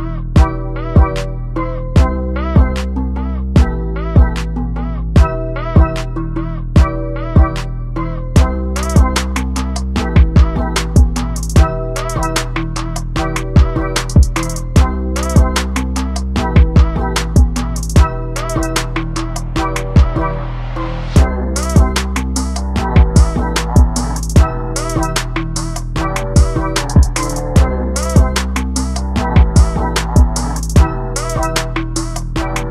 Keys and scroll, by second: 1.1 Delete, 1.3 s, 1.4 Caps_Lock, 1.6 e, 1.8 d, 2.0 s.